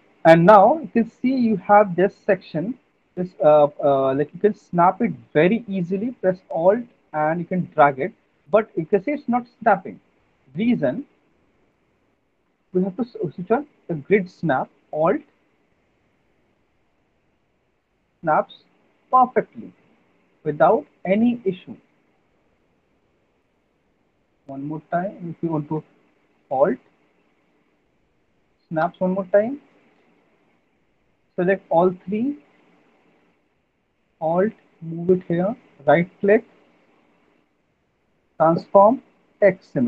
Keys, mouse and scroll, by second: 0.0 alt+click, 1.2 alt+middle click, 2.3 alt+click, 10.5 ctrl+z, 10.7 ctrl+z, 12.6 alt+right click, 14.2 click, 18.2 alt+click, 21.1 alt+right click, 22.2 alt+click, 22.9 alt+middle click, 26.0 ctrl+z, 28.7 alt+click, 29.8 shift+click, 31.6 alt+right click, 32.5 alt+click, 36.1 shift+right click, 39.7 click.